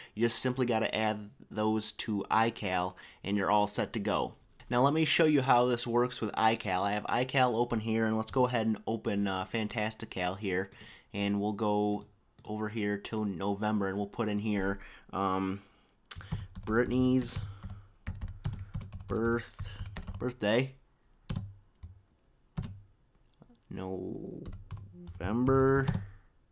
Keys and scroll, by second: 16.1-20.6 typing, 21.6-22.6 typing, 23.6-26.1 typing.